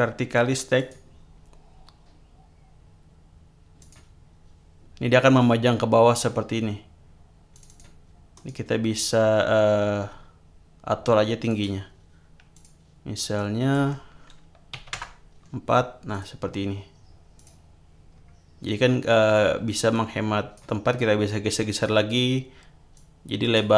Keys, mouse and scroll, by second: 0.7 click, 3.8 click, 7.5 click, 8.3 right click, 11.5 click, 12.5 click, 13.3 click, 14.7 4, 14.9 Return, 16.1 click, 17.3 click, 18.1 scroll down 2, 19.9 click, 21.6 click, 22.9 click.